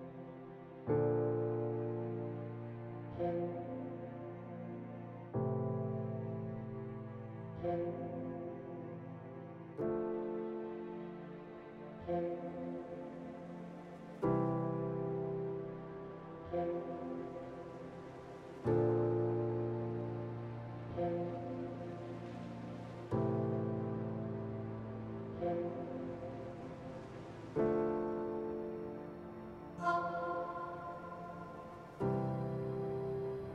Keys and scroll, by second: 0.1-1.1 typing, 2.1 2, 2.5 1, 5.9-7.8 typing, 9.7-11.7 typing, 13.2 s, 13.8 2, 15.0 2, 15.4 w, 16.0 q, 22.8 s, 24.1-27.1 typing, 29.9-33.3 typing.